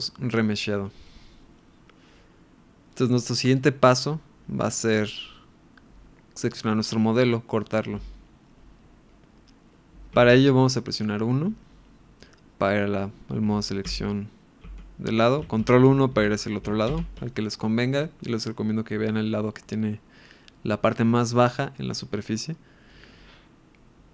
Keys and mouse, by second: 0.4-6.6 middle drag, 10.1 KP_1, 13.9 ctrl+KP_1, 16.1 KP_1, 16.9 ctrl+KP_1.